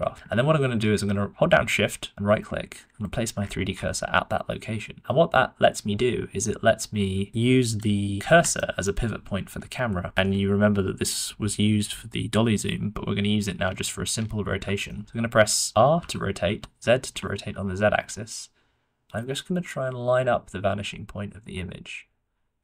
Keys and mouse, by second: 2.8 shift+middle click, 8.5 shift+middle drag, 14.8 shift+middle click, 15.9 r.